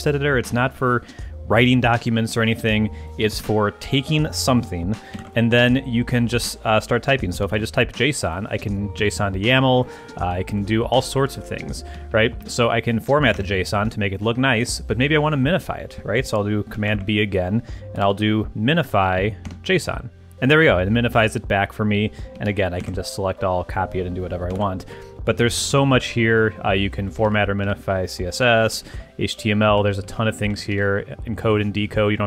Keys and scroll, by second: 3.4 super+v, 5.2 super+b, 7.1-7.9 typing, 9.0 Down, 11.9 Up, 13.3 Return, 16.9 super+b, 17.8-18.6 typing, 19.0 Down, 19.4 Return, 22.4 super+a, 22.8 super+c, 24.5 super+b, 25.4 super+c, 25.6 s, 27.2 super+a, 27.6 super+BackSpace, 28.3-29.4 typing, 29.7 Down, 30.4 Up, 31.0 Down.